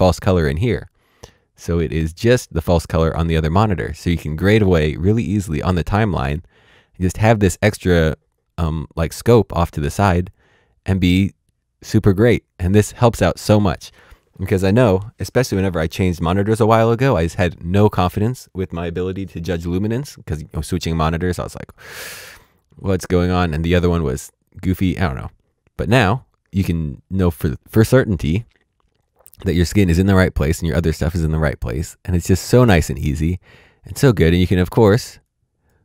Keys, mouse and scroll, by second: 1.8 click, 8.0 click, 23.2 click, 34.0 click.